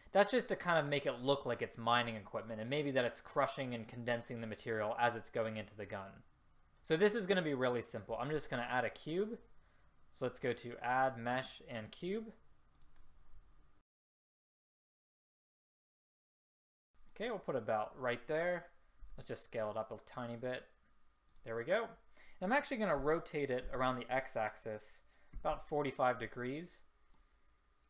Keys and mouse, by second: 15.1 s, 15.6 middle click, 15.9 drag, 16.3 middle click, 16.4 drag, 16.8 ctrl+z, 19.2 s, 23.2 r, 27.3 middle click, 27.6-27.8 middle drag.